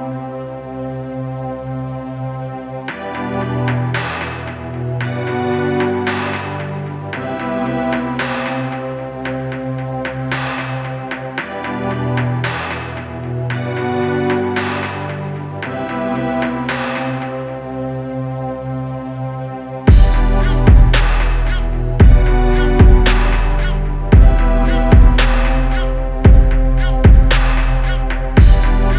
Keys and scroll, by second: 5.0 ctrl+z.